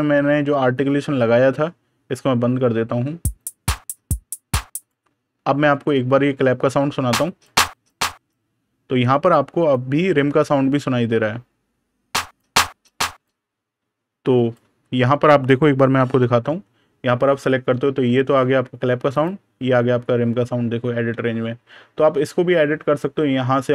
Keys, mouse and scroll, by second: 2.3 click, 7.1 click, 12.1 click, 16.3 super+KP_Add, 19.0 click, 20.7 super+KP_Subtract, 21.3 super+KP_Add, 22.8 click.